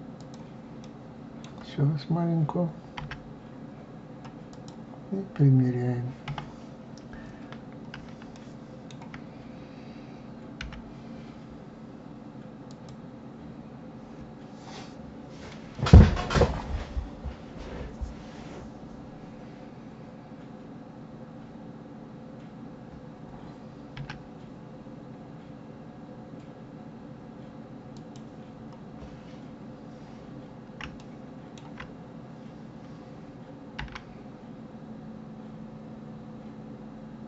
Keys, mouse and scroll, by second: 0.8-3.0 middle drag, 3.0 s, 6.3 KP_7, 7.6-7.9 scroll up 2, 8.3-10.6 shift+middle drag, 10.6 g, 24.0 s, 28.5-29.8 scroll up 5, 30.3-31.0 scroll down 2, 31.0-31.9 shift+middle drag, 31.9-32.2 scroll up 2, 33.8 g.